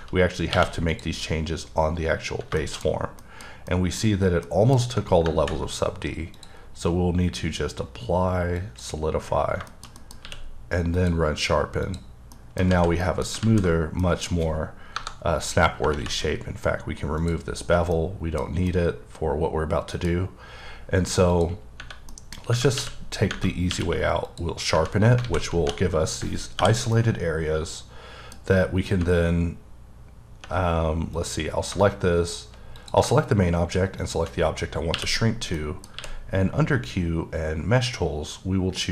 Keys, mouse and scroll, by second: 0.6 q, 0.9 click, 2.6 shift+middle click, 3.7 middle click, 4.0 scroll down 1, 4.5 middle click, 6.3 click, 8.6 click, 9.7 shift+middle click, 10.2 q, 11.0 click, 11.8 click, 12.4 middle click, 12.7 alt+z, 13.0 middle click, 13.4 z, 14.0 middle click, 14.9 KP_Divide, 17.2 click, 18.0 middle click, 18.7 middle click, 21.4 click, 22.1 middle click, 22.8 q, 23.7 q, 24.3 click, 25.2 alt+a, 26.9 middle click, 31.1 click, 34.0 shift+click, 34.9 q, 35.5-35.9 scroll up 1, 35.9 middle click, 36.0 q.